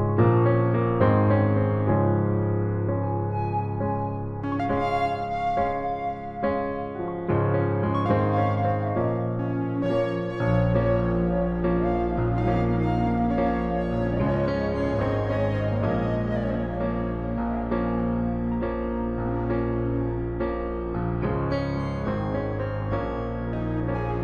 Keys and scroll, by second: 0.0-1.9 typing, 1.0 ctrl+z, 13.3 ctrl+z, 21.4 ctrl+shift+z.